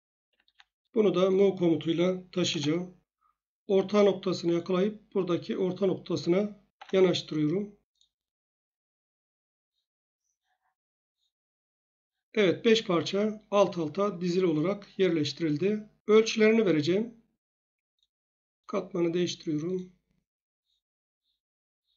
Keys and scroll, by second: 2.3 ctrl+m, 2.5 Return, 6.7 F8.